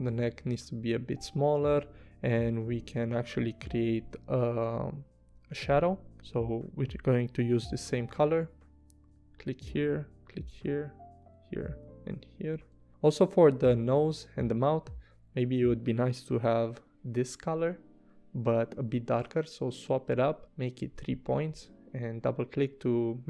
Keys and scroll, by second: 3.3 a, 7.7 p, 12.5 v, 16.4 i.